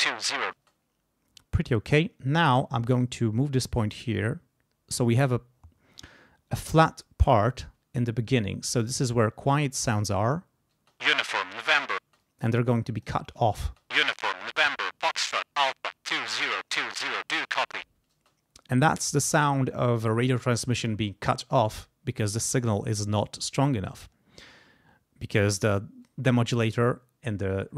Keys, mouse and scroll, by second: 0.6 space, 1.7-4.1 drag, 10.8 space, 12.0 space, 12.2-13.2 scroll up 1, 13.7 space, 18.2 space.